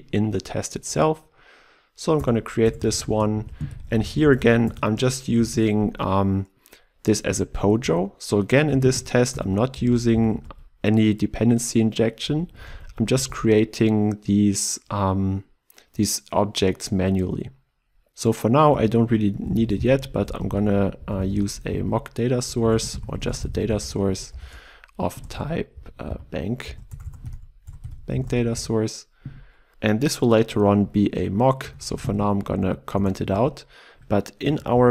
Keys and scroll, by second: 2.1 alt+Return, 3.0 Return, 9.4 Return, 13.1 ctrl+w, 22.6 ctrl+BackSpace, 28.7 Return, 31.7 ctrl+/.